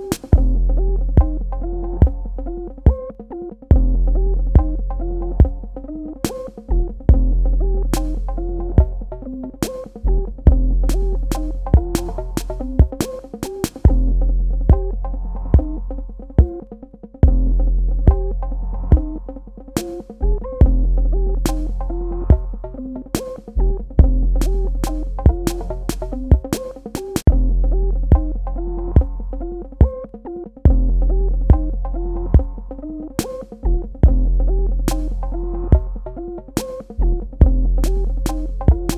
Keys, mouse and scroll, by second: 2.5 ctrl+alt+click, 3.3 ctrl+alt+click, 5.3 space, 5.4 click, 5.8 ctrl+click, 7.9 a, 8.4 ctrl+click, 8.9 space, 9.9 click, 17.0 space, 17.2 click, 17.6 ctrl+alt+click, 19.1 ctrl+click, 19.9 ctrl+click, 23.5 space, 23.6 click, 26.7 space, 26.9 click, 27.3 space, 27.9 click, 30.0 space, 30.2 ctrl+alt+click, 31.1 ctrl+click, 31.9 ctrl+alt+click, 36.0 shift+click.